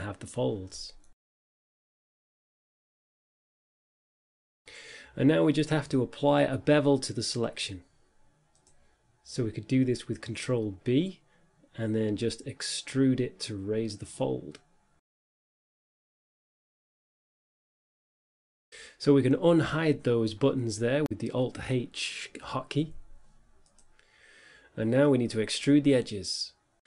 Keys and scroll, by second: 12.1 e, 16.7 Tab, 21.3 Tab, 23.7 a.